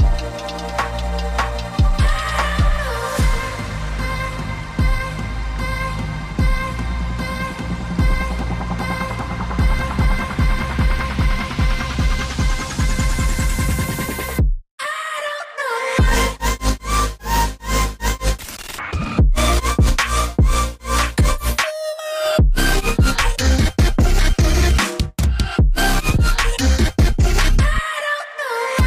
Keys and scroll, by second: 1.2 a, 2.2 g, 6.5 v, 12.9-13.8 typing, 13.3 ctrl+2, 18.5 v, 19.1 a, 19.5 g, 20.6 v, 23.4 ctrl+z, 24.5 ctrl+z, 26.7 a, 27.5 ctrl+3, 27.8 g.